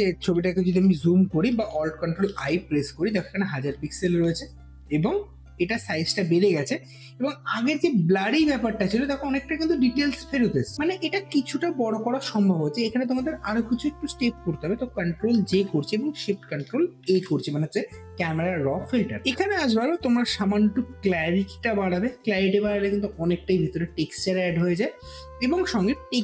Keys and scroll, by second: 1.9 ctrl+alt+i, 8.9 alt+space, 15.2 ctrl+j, 15.8 ctrl+j, 16.8 ctrl+shift+a.